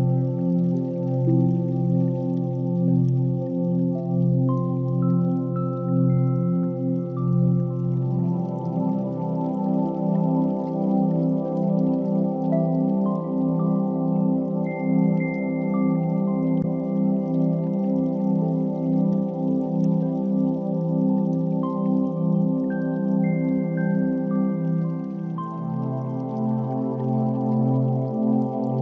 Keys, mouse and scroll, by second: 2.0-4.0 drag, 2.9 0, 3.3 0, 5.1 click, 6.5 click, 7.8 click, 9.0-9.8 drag, 10.8 drag, 11.9-15.8 drag, 13.0-14.9 typing, 16.8 click, 17.4 click, 18.6 n, 20.2 drag, 21.2 click, 24.7 click, 25.4-26.4 drag.